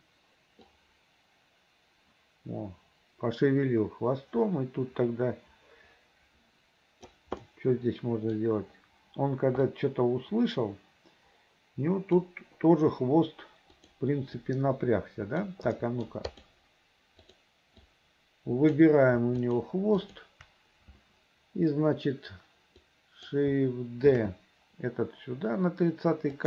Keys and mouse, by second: 0.8-7.2 drag, 7.5 middle click, 9.8-12.3 drag, 13.9 click, 14.5-15.6 drag, 15.9 middle click, 16.5 click, 17.3 click, 18.0 click, 19.5 shift+click, 20.1 shift+click, 23.1 click, 24.2 shift+d.